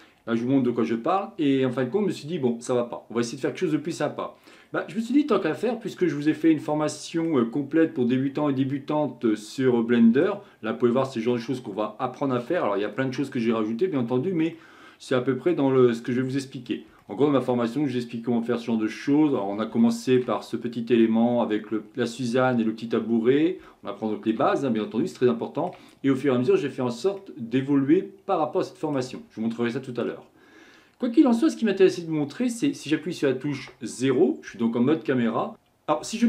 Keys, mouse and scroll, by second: 2.5-4.7 middle drag, 4.7-5.4 scroll up 1, 5.4-7.7 shift+middle drag, 7.7-8.7 scroll down 1, 8.7-14.3 middle drag, 14.5-16.0 middle drag, 16.0 scroll up 3, 16.1 middle click, 16.6-17.0 scroll down 1, 17.0-19.4 shift+middle drag, 19.4-19.8 scroll up 6, 19.8-20.2 shift+middle drag, 20.2-21.0 scroll up 1, 21.0-23.0 scroll up 1, 23.0 scroll down 4, 23.6-24.6 shift+middle drag, 24.6-25.1 scroll down 2, 25.1-29.1 shift+middle drag, 29.1-30.6 scroll up 1, 30.6-31.9 scroll up 1, 33.6 KP_0, 35.5-36.2 drag.